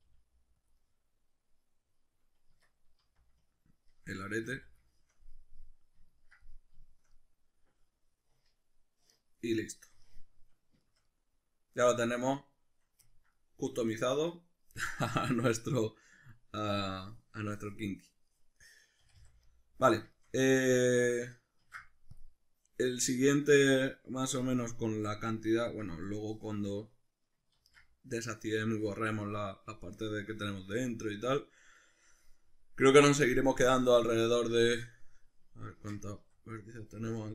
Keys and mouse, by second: 0.0 g, 0.7 click, 0.7 middle click, 2.5 Tab, 3.0 z, 3.5 ctrl+middle click, 4.3-15.0 middle drag, 4.3 a, 15.0 right click, 16.7-24.6 middle drag, 19.0 a, 21.6 ctrl+s, 24.6 right click, 25.3 right click, 26.0 right click, 27.6 ctrl+z, 34.8 right click, 35.7 Tab, 36.2 a.